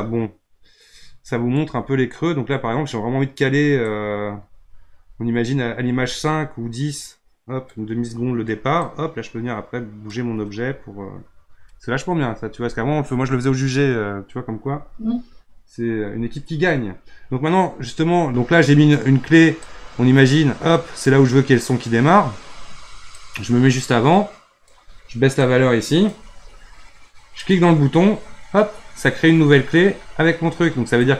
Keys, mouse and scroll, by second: 8.8-11.8 drag, 19.6-22.6 drag, 23.2-27.5 drag, 31.0-31.1 drag.